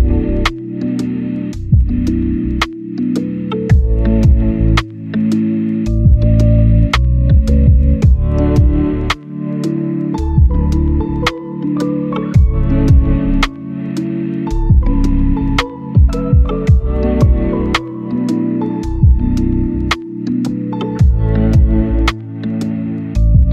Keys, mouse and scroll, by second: 0.1 right click, 0.7 scroll down 1, 0.8 right click, 1.6 scroll up 1, 1.8 right click, 2.0 scroll down 1, 2.2 right click, 3.1 scroll up 1, 3.2 right click, 3.9 scroll down 1, 4.0 scroll up 1, 4.1 right click, 4.6 scroll down 1, 4.8 scroll up 1, 4.9-6.2 right drag, 6.2 right click, 6.4 click, 6.8 scroll down 1, 6.9 right click, 7.1 scroll up 1, 7.2 right click, 9.6 click, 9.8 scroll down 1, 9.9 right click, 10.2 scroll up 1, 10.4 right click, 10.8-11.6 scroll up 1, 12.2 click, 14.9-15.5 scroll down 2, 15.2 right click, 15.5 scroll up 1, 15.7 right click, 16.1 scroll up 1, 16.3 click, 16.5 scroll down 1, 16.9 click, 17.2 right click, 18.2 scroll down 1, 18.3 scroll up 1, 18.4 right click, 19.3 right click, 20.0-20.6 scroll down 1, 20.6 right click, 20.7-21.2 scroll down 1, 21.2-22.1 scroll up 1, 22.1 right click, 22.6 middle click.